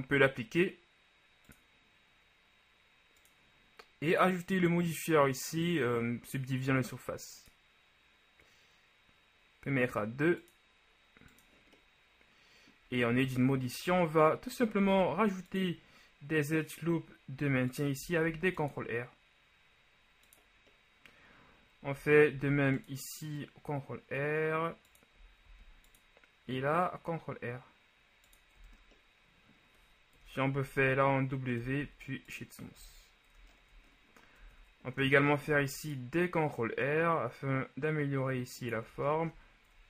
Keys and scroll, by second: 13.2 Tab, 14.0 ctrl+Tab, 14.9 ctrl+r, 18.3 ctrl+r, 22.4 ctrl+r, 25.5 ctrl+r, 30.2 KP_1, 31.7 w, 33.4 ctrl+a, 34.4 Tab, 35.0 ctrl+Tab, 35.5 ctrl+r.